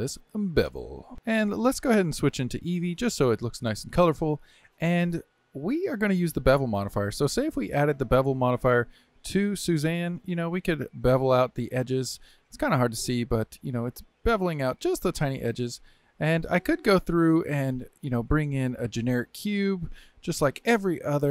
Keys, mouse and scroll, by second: 1.1 click, 2.9 click, 4.1-7.1 middle drag, 7.2 click, 8.7-10.3 drag, 10.5-12.0 drag, 12.0-12.7 scroll up 1, 12.7-14.3 middle drag, 14.3-16.0 drag, 16.0-16.6 scroll down 1, 16.6-18.9 middle drag, 18.9 x, 19.9 shift+a.